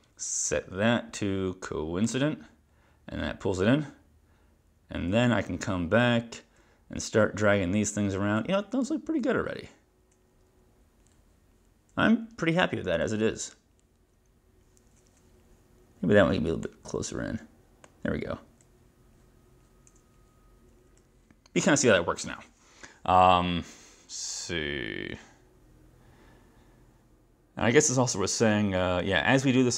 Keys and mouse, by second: 2.1 click, 16.7 click.